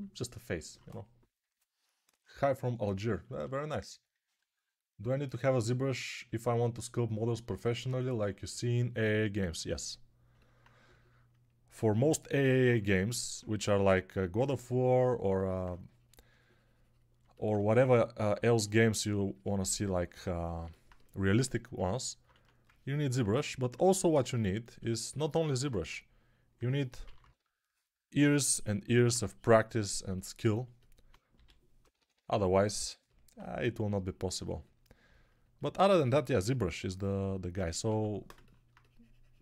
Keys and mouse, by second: 13.4 2, 22.2 1, 25.7 1, 26.4 2, 26.9 [, 27.1 [, 31.2-32.1 typing, 37.7 6.